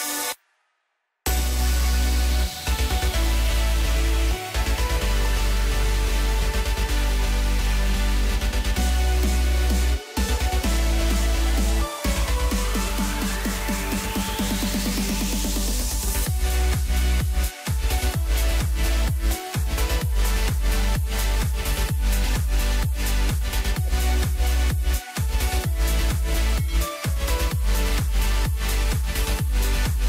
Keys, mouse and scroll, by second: 0.4 scroll down 3, 0.6 middle click, 1.2 Tab, 2.1 drag, 2.4-5.0 middle drag, 5.0 KP_1, 6.2-6.5 scroll up 2, 6.5 scroll down 2, 6.6-8.8 middle drag, 8.8 KP_1, 10.6 click, 11.5-13.3 drag, 13.3-13.7 scroll up 2, 13.7-14.5 scroll down 3, 14.5 click, 16.0 click, 17.0-19.0 drag, 19.2-20.0 scroll down 2, 20.0-23.1 drag, 23.3 click, 24.2 click, 25.4 click, 26.1-27.1 drag.